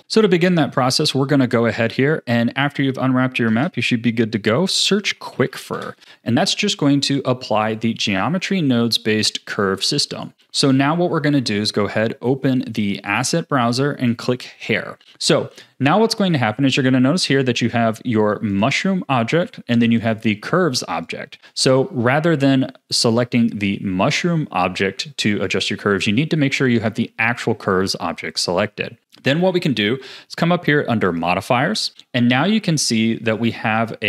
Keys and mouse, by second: 3.5 space, 6.7 a, 9.0-10.2 drag, 12.0-13.1 drag, 14.1 click, 20.0 click, 25.4 click, 26.7 click, 33.5 click.